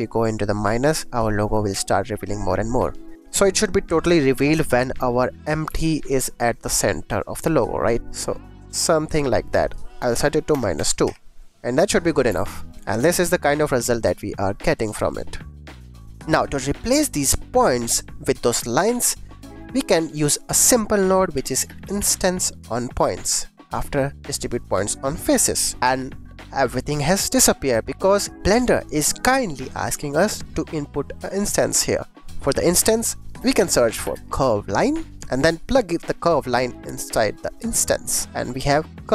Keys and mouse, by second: 5.3 click, 5.6 g, 5.7 x, 6.4 click, 8.0-9.5 shift+drag, 9.6-11.0 drag, 12.2 g, 12.3 x, 16.4 shift+click, 19.3 middle click, 19.5 click, 20.4 shift+a, 25.1 click, 25.8-26.8 drag, 26.8 middle click, 27.0 click, 27.2 middle click, 28.1 middle click, 28.8 click, 31.9 click, 32.4 shift+a, 35.7 click, 36.2-37.7 drag, 38.7-39.1 drag.